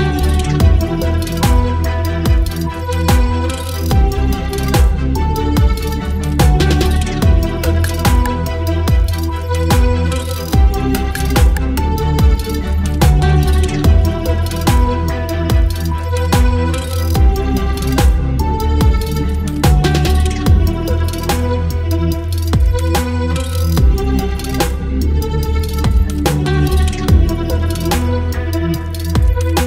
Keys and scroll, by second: 0.4 Delete, 4.3 Delete, 5.0 Delete, 6.3 Delete, 7.1 Delete, 8.6 ctrl+BackSpace, 11.1 Delete, 13.5 ctrl+v, 16.1 Return, 16.9 space, 17.9 space, 18.1 l, 19.8 ctrl+BackSpace, 21.4 ctrl+BackSpace, 23.1 ctrl+BackSpace, 26.1 Delete, 26.5 ctrl+z, 28.1 ctrl+BackSpace, 28.3 ctrl+z, 28.5 Delete.